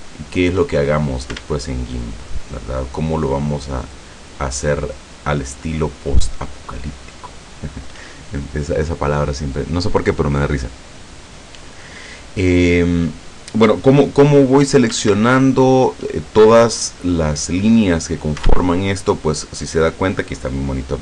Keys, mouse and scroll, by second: 2.0 alt+shift+right click, 2.5 alt+shift+right click, 3.9 alt+shift+right click, 4.9 alt+shift+right click, 6.3 alt+shift+right click, 7.1 alt+shift+right click.